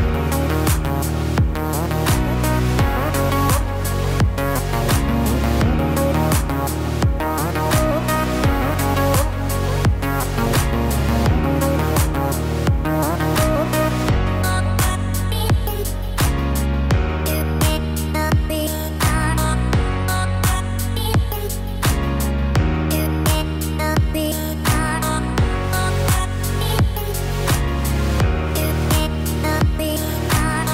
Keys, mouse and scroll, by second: 2.0 a, 2.7-3.3 scroll down 3, 3.1 middle click, 15.0 middle click, 26.6 middle click, 27.6-28.1 scroll up 1, 28.1 Tab, 28.5 click, 28.8-29.7 scroll down 8, 29.5 middle click, 30.1-30.7 scroll up 11.